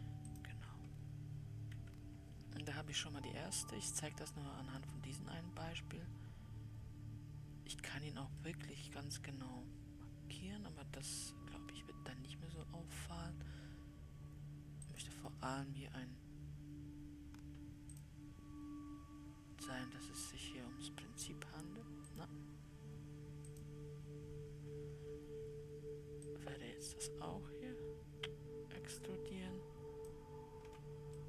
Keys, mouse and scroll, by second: 0.7-1.0 x, 2.2 Escape, 3.3-5.9 middle drag, 5.9-6.5 scroll up 1, 6.5-7.2 scroll up 2, 9.0-11.5 middle drag, 11.5-12.5 scroll up 1, 12.5-14.5 scroll up 1, 15.4-18.4 drag, 22.6-24.1 drag, 24.9-25.3 scroll down 5, 26.6-29.7 drag.